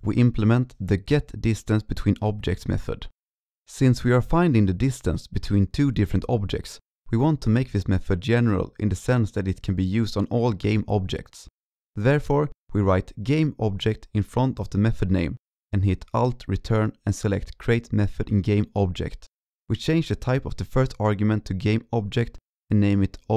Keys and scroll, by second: 0.0 alt+Left, 3.6 ctrl+Left, 15.7 ctrl+Right, 16.2 alt+Return, 22.1 ctrl+shift+Right.